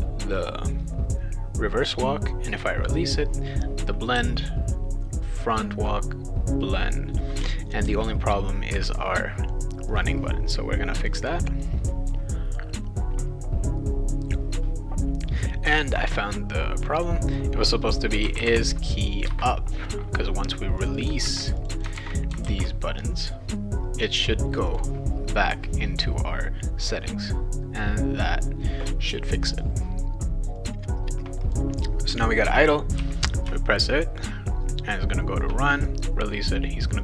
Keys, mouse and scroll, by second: 4.1 w, 7.9 shift+w, 9.9 click, 11.0 click, 16.9 click, 17.9-19.0 typing, 19.3 Return, 20.8 click, 21.0 click, 21.2 ctrl+c, 21.6 click, 21.8 click, 21.9 ctrl+v, 22.4 ctrl+s, 24.7 click, 31.4 click, 33.0 w.